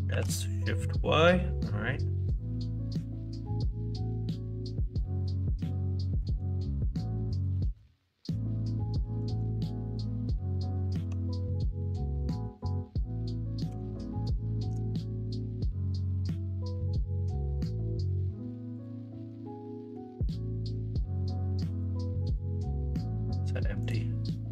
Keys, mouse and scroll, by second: 7.7 ctrl+z, 13.8 s, 19.3 middle click, 20.0 Tab, 20.4 middle drag.